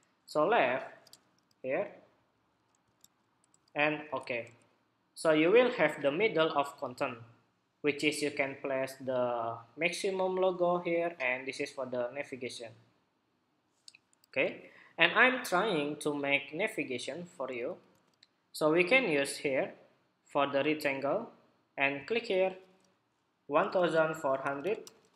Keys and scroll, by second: 17.8 shift+super+2.